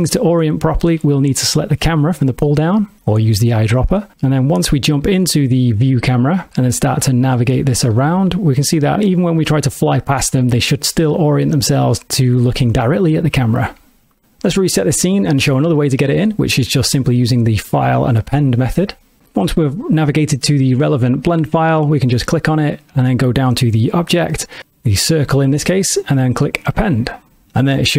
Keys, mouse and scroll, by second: 0.2 ctrl+middle click, 1.8 click, 6.9 shift+`, 7.6 w, 8.0-13.4 d, 13.5 s, 14.2 click, 14.4 click, 17.1 click, 27.7 click.